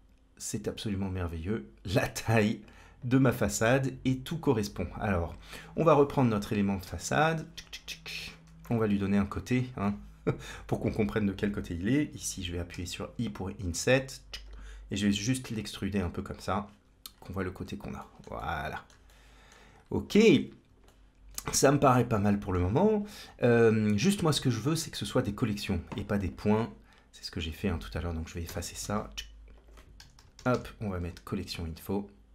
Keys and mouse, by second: 1.2-2.5 drag, 2.8-4.2 drag, 4.7 click, 6.7 KP_Decimal, 8.0 Tab, 8.7 3, 9.1 click, 9.7 middle click, 15.0 e, 16.5 Tab, 17.4 ctrl+space, 17.8 shift+middle drag, 18.2-18.8 middle drag, 18.9 shift+middle click, 20.8 shift+middle click, 21.8 middle click, 23.3 click, 24.2 middle click, 25.5 click, 26.1-27.7 drag, 28.3 x, 28.9 shift+a, 30.4 l.